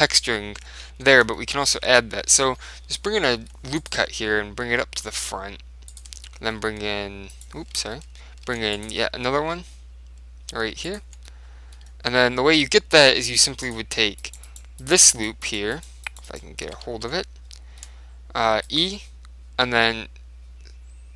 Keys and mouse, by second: 0.6-2.5 middle drag, 1.0 Tab, 2.5 KP_3, 3.7 ctrl+r, 6.1 click, 6.5 e, 7.9 ctrl+z, 8.5 ctrl+r, 11.1 click, 11.6-13.7 middle drag, 13.7 click, 14.3-18.3 right drag, 17.0 ctrl+z, 17.7 click, 18.7 e, 18.9 click, 18.9-20.8 right drag, 19.8 s.